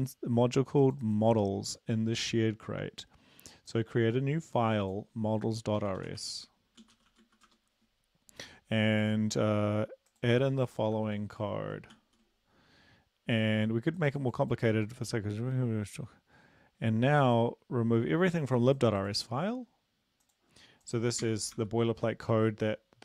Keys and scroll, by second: 5.8-7.5 typing, 10.9 ctrl+v, 12.0 ctrl+s, 21.2 ctrl+a, 21.6 ctrl+v.